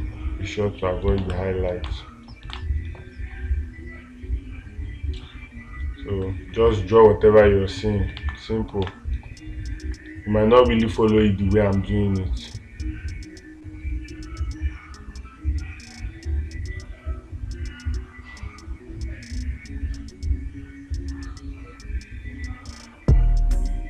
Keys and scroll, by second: 1.6 space, 3.0 space, 8.6 space.